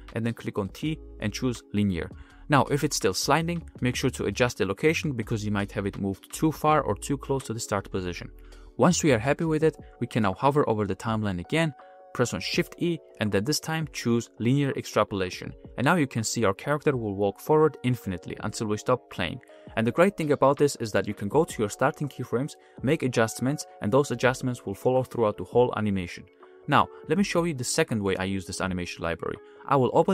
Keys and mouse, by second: 1.8-2.1 drag, 2.7 click, 2.7 space, 3.3 space, 3.5 click, 4.4-7.1 drag, 7.5 g, 8.7 a, 9.0 a, 9.1 a, 10.7 a, 10.9 a, 11.2 shift+e, 12.6 shift+e, 16.4-16.9 middle drag, 17.7 middle click, 17.9 space, 20.2-20.7 drag, 21.4-22.7 drag, 22.9 space, 23.3 click, 24.8 g.